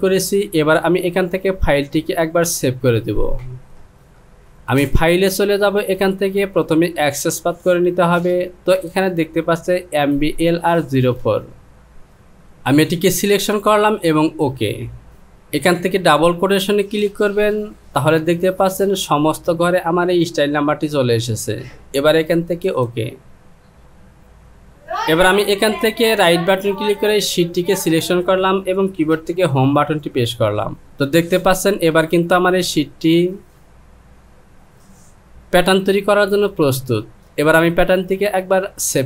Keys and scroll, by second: 29.8 Home.